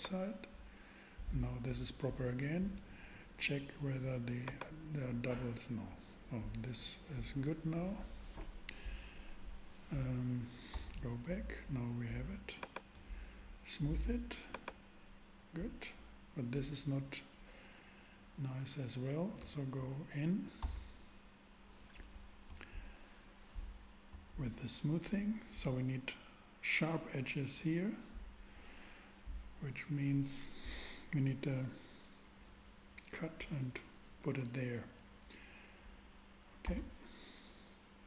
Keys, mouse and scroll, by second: 4.4 click, 10.7 Tab, 20.6 Tab, 36.6 Tab, 37.6 Tab.